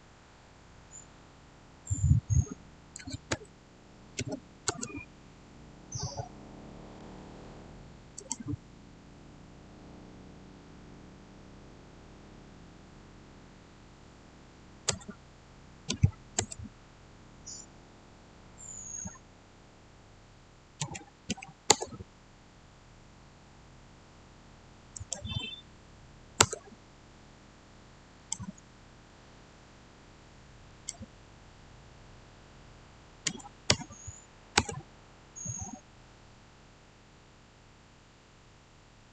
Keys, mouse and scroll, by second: 2.7-4.1 typing, 4.6 Return, 8.1 click, 11.1-12.8 scroll up 1, 14.8-16.3 typing, 20.7 Return, 20.7-21.2 typing, 21.6 Return, 24.8 click, 26.3 Return, 28.1 click, 29.0-30.6 middle drag, 30.6 click, 33.2-33.6 typing, 34.4 Return.